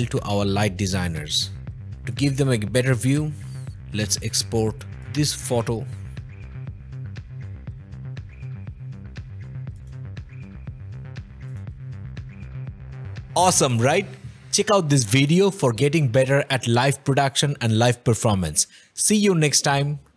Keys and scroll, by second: 0.0 o, 1.6 o.